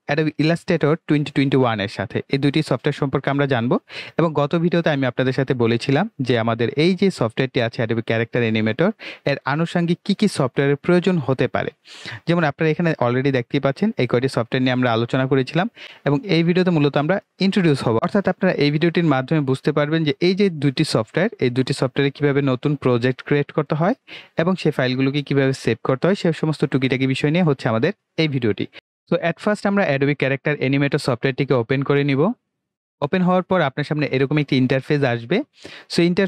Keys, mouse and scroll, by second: 2.7 click, 7.6 click, 12.3 click, 28.7 click, 30.1 click.